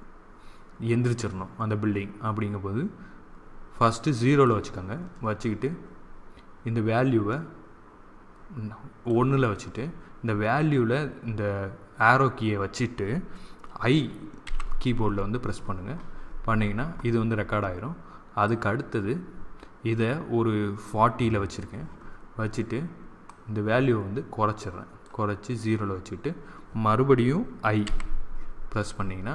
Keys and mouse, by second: 6.9-8.8 drag, 14.4 i, 18.4-20.1 drag, 23.2-25.0 drag, 27.7 i.